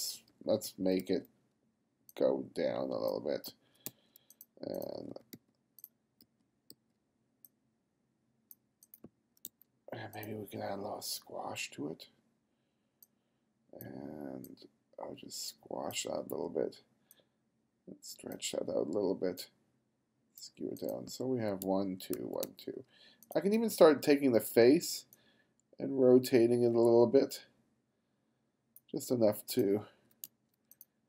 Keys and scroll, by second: 3.5 f, 3.9 g, 5.0 b, 6.2 b, 9.1 f, 9.5 g, 10.5 b, 21.2 f, 21.7 g, 22.2 f, 22.5 g, 23.6 b, 29.8 f, 30.3 g.